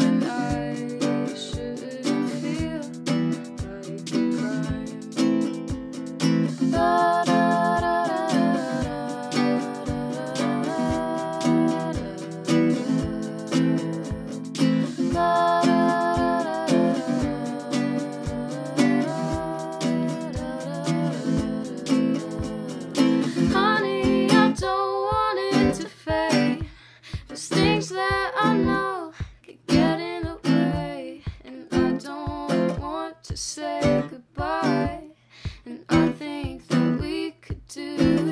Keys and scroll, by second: 2.1 1, 2.5 ;, 3.0 BackSpace, 3.3 2, 4.2 Return, 26.0 ctrl+space, 27.2 c, 28.4-29.3 typing, 32.9-33.9 typing, 34.7 Tab, 35.6-38.1 typing, 37.4 Tab.